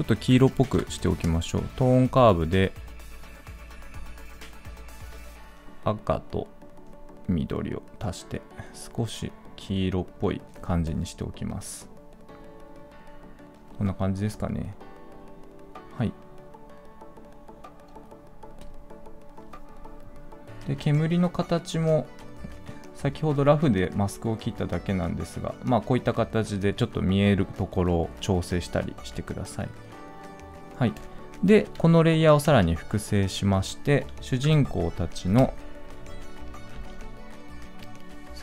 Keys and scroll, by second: 32.3 ctrl+d, 34.3 ctrl+p.